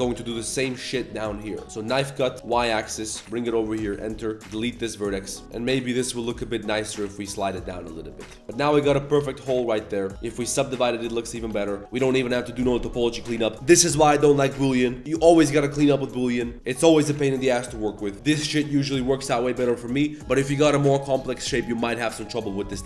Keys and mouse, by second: 0.0-1.6 typing, 0.9 click, 1.2 shift+click, 4.3 click, 4.5 x, 5.2 middle drag, 5.4 Tab, 5.7 middle click, 6.2 g, 7.5 Tab, 7.6 middle drag, 8.1-8.4 middle drag, 8.4 Tab, 8.4 s, 8.4 a, 8.5 1, 8.7 alt+click, 8.9 Tab, 8.9 middle drag, 9.2 ctrl+s, 9.9 ctrl+1, 10.1 click, 10.5 click, 10.7 Tab, 10.8 1, 11.0 alt+click, 11.4 shift+s, 14.0 middle click, 14.9 middle click.